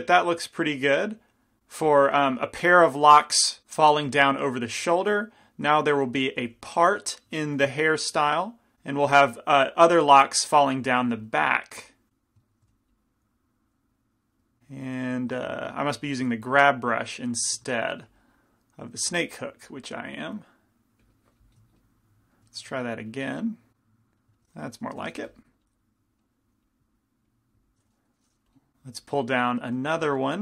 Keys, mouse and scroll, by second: 1.9-3.6 middle drag, 4.5-8.8 middle drag, 5.9 f, 6.6 f, 7.7 f, 8.8 f, 9.4-11.2 drag, 10.9-13.6 middle drag, 11.2 f, 12.7 f, 13.0-14.0 drag, 14.9 middle click, 15.4 ctrl+z, 16.5 ctrl+z, 17.9 ctrl+shift+z, 18.3-22.0 drag, 23.3 click, 25.0 g, 25.2 f, 25.7 click, 26.7-28.1 drag, 28.5-29.6 drag, 30.0 f.